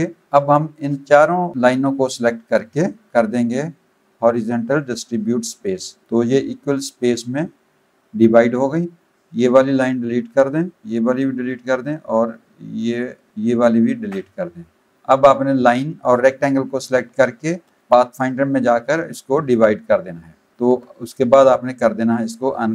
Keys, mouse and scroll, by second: 0.8 click, 5.1 click, 6.1 click, 8.2 click, 10.3 Delete, 10.9 click, 11.5 Delete, 12.3 click, 13.3 click, 14.1 Delete, 14.9 click, 15.5 click, 17.8 click, 19.6 click, 20.5 click, 21.0 right click.